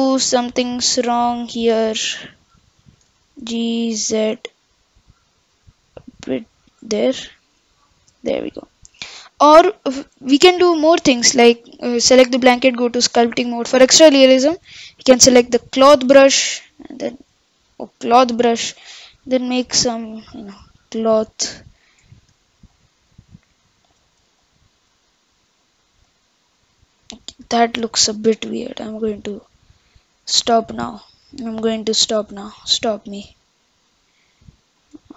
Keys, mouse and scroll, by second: 3.0 g, 6.9-8.6 middle drag, 8.6-9.1 scroll down 4, 9.1-12.3 middle drag, 12.5 click, 16.5-17.8 drag, 18.6-20.4 drag, 20.7 click, 22.7 click, 28.6 click, 31.7 click.